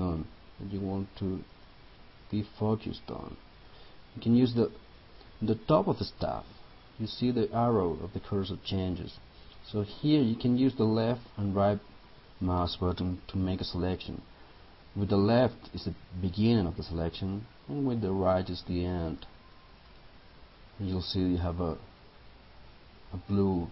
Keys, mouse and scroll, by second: 1.6 click, 19.9 right click.